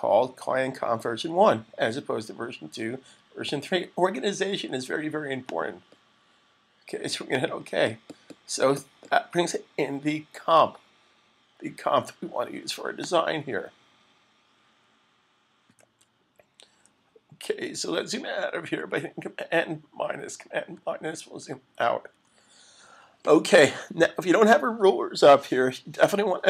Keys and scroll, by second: 20.6 super+-, 21.1 super+-.